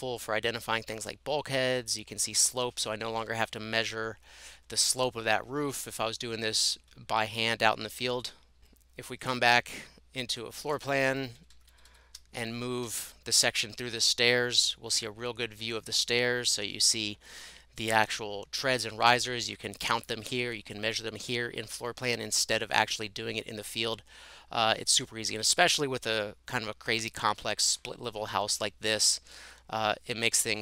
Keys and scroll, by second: 11.4 shift+Right, 11.6 shift+Right, 11.8 shift+Right, 11.9 shift+Right, 12.8 Escape, 13.0 Escape.